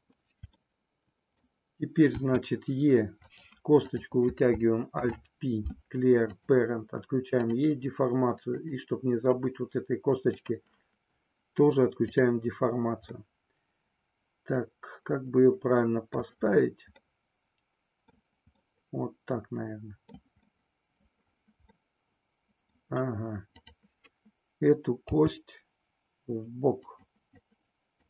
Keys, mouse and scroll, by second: 0.8 middle click, 2.1 e, 3.8 click, 4.8 alt+p, 7.4 click, 8.4 click, 10.3 click, 13.2-16.1 middle drag, 16.9-18.2 middle drag, 18.6-20.2 middle drag, 20.4 middle click, 21.8-22.8 middle drag, 24.9 g, 26.9 click, 27.3 click.